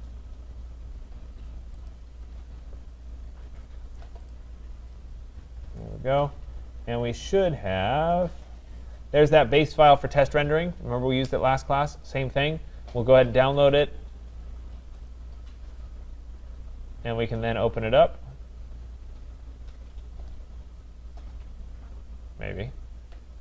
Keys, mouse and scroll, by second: 1.9 click, 3.4-4.3 scroll, 4.3 click, 5.7-6.9 scroll, 7.1 scroll, 7.6 scroll, 8.5 scroll, 12.0 click, 15.1 click.